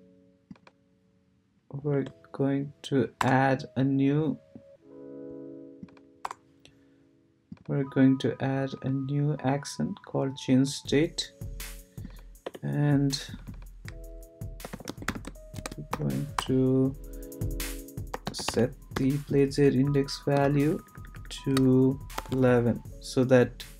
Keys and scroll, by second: 1.9 Return, 3.2 BackSpace, 6.2 BackSpace, 12.4 Return, 14.4-16.4 typing, 17.9-19.4 typing, 19.6 Right, 20.3 shift+Right, 22.2 shift+\.